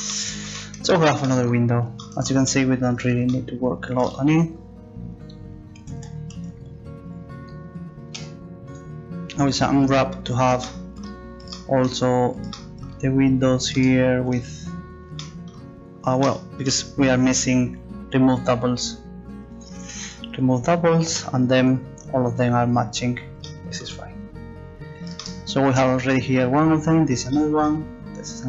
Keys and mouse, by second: 5.8 a, 6.0 a, 6.3 a, 8.2 u, 18.4-21.2 drag, 22.3 u.